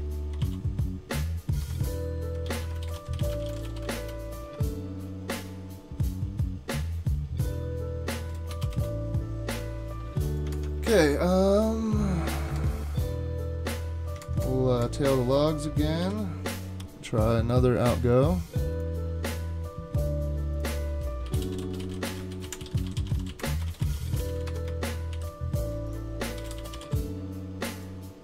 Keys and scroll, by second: 0.0-0.9 typing, 1.6 Tab, 2.6-4.5 typing, 8.5 BackSpace, 8.7 Return, 10.5 super+Tab, 12.5 super+Tab, 14.2 super+Tab, 14.4 super+Tab, 14.8 super+Tab, 16.0 super+k, 21.0-25.1 typing, 26.2-27.3 typing.